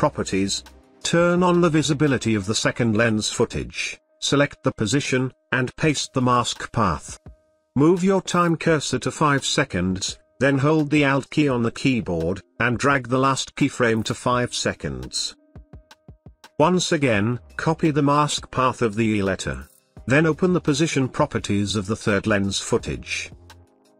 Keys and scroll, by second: 5.8 ctrl+v, 17.4 ctrl+c, 21.0 p.